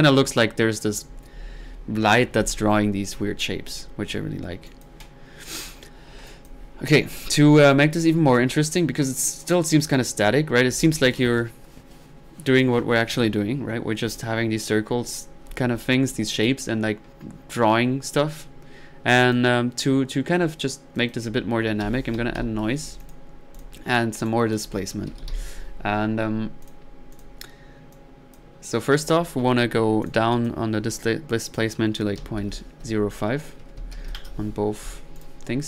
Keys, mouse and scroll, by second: 4.1-4.7 middle drag, 4.7 click, 7.3 middle click, 7.6 click, 8.4 right click, 8.8-10.1 drag, 9.9-10.5 typing, 16.1 click, 16.3 typing, 18.5-19.0 middle drag, 19.2 click, 21.0 middle click, 21.6-22.9 typing, 23.0 click, 23.2 drag, 23.6 drag, 24.2 right drag, 24.5 click, 24.9-25.8 typing, 26.6 click, 27.2-27.6 drag, 27.9-28.9 drag, 31.5-31.9 drag, 35.2 click.